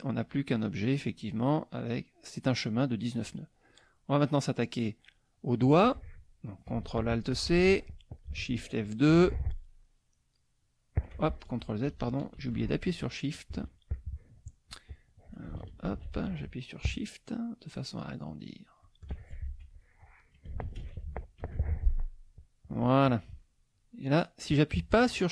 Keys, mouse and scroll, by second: 3.7 click, 7.3 ctrl+alt+c, 8.9 shift+F2, 10.4 click, 12.4 ctrl+z, 15.9 ctrl+alt+c, 18.0 shift+click, 18.5 shift+click, 18.8 shift+click, 19.5 shift+F1, 19.7 shift+click, 20.7 ctrl+alt+c, 21.4 ctrl+alt+shift+F2, 22.3 shift+click, 23.7 click.